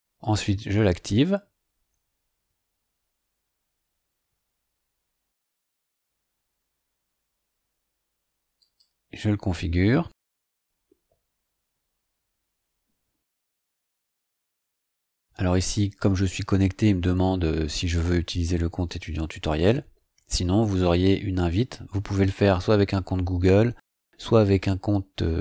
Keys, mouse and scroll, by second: 0.2 click, 8.5 click.